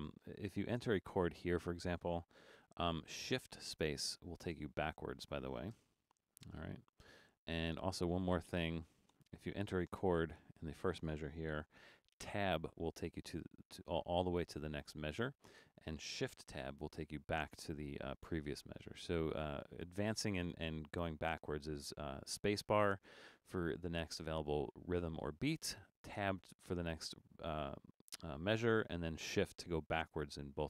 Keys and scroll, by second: 2.6 shift+d, 4.4 shift+space, 5.7 shift+space, 11.6 shift+d, 12.5 Tab, 16.6 shift+Tab.